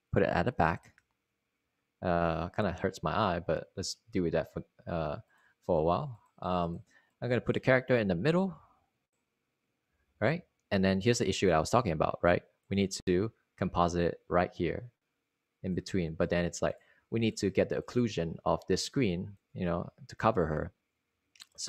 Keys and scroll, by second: 1.8 Return, 2.7 Return, 3.5 shift+super+9, 12.7 s, 19.1 z.